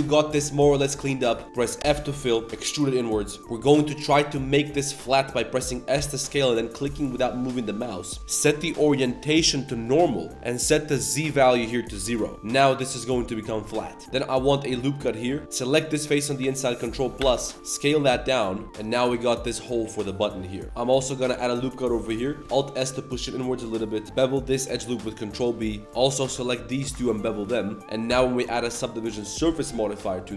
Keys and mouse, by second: 0.5-0.9 middle drag, 1.0 middle click, 1.4 middle click, 1.8 f, 2.2 middle click, 2.5 e, 3.4 z, 4.1-5.1 middle drag, 5.9 s, 8.5-9.8 drag, 11.2 click, 13.8 middle click, 14.0 ctrl+r, 15.4 ctrl+KP_Add, 15.6 click, 17.2 ctrl+KP_Add, 17.5 s, 20.6 ctrl+z, 20.9 ctrl+r, 21.6 click, 22.0 click, 22.4 alt+s, 24.0 ctrl+b, 24.0 2, 25.8 alt+click, 25.8 2, 26.1 alt+shift+click, 26.7 ctrl+b, 27.8 Tab, 27.8 ctrl+s, 29.3 ctrl+1, 30.1 click.